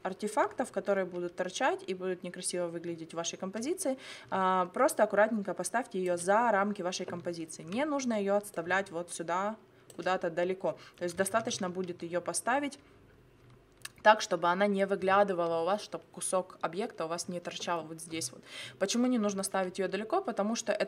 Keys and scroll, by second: 11.3 ctrl+z.